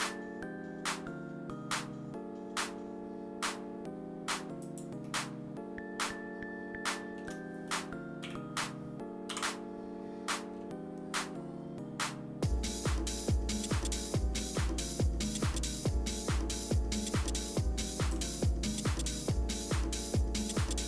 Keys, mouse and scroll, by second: 5.1-7.2 shift+middle drag, 8.4 KP_4, 9.3 KP_7, 10.5-10.9 scroll up 2, 14.4 alt+s, 18.4 shift+middle click, 19.1 shift+scroll up 1, 19.2-19.8 shift+scroll down 1, 19.8 shift+middle click, 20.0 shift+middle click, 20.6 shift+middle click.